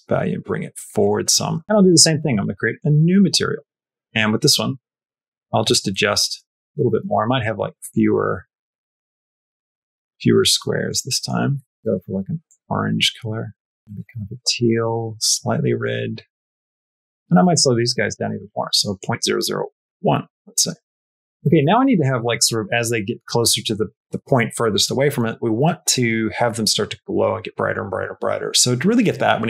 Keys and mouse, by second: 1.6 shift+middle click, 3.5 shift+middle click, 4.2 shift+middle click, 6.7 middle click, 7.8-10.7 drag, 11.0 shift+middle click, 11.4 shift+middle click, 16.4 shift+space, 16.5 shift+middle click, 17.1 click, 17.5-20.1 drag, 20.4 space, 21.1 space.